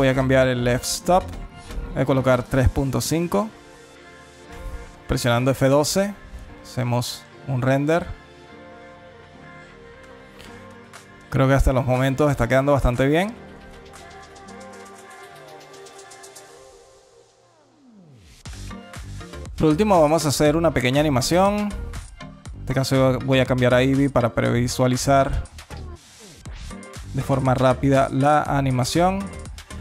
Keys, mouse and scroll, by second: 1.7 click, 19.1 alt+middle click, 20.1 click, 20.7 click, 24.5 click.